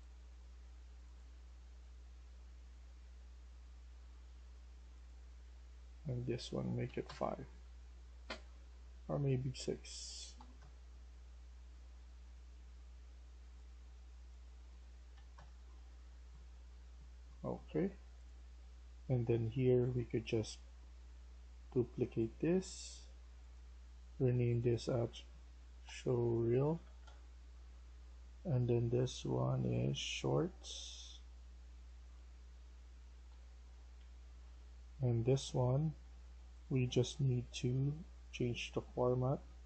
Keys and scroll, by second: 1.0-1.7 typing, 6.8 typing, 6.9 Return, 8.8 typing, 10.2-10.9 typing, 14.8-15.5 typing, 25.1-27.4 typing, 32.5-34.3 typing.